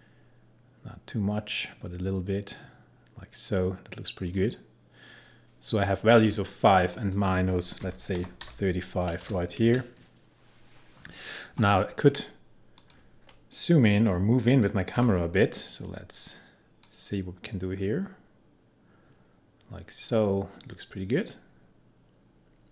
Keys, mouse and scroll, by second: 7.1 click, 7.6-9.2 typing, 12.8 click, 15.0 p, 16.9-22.7 drag.